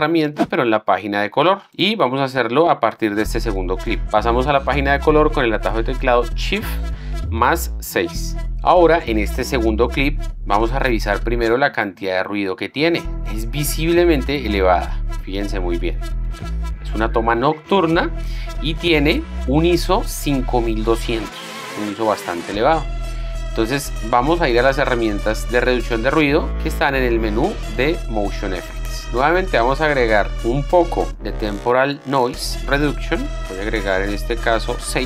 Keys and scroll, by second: 3.2 z, 8.3 shift+6.